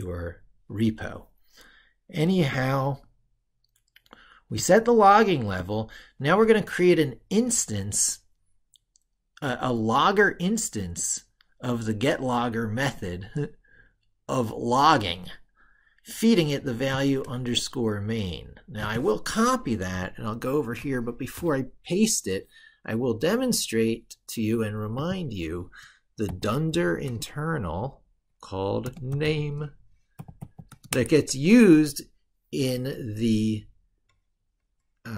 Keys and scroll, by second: 19.9 ctrl+super+Right.